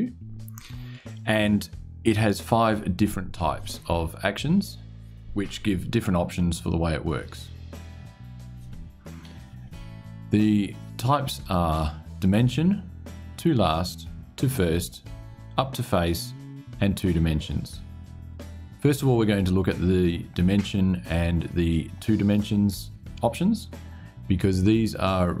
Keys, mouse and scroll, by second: 1.9 click.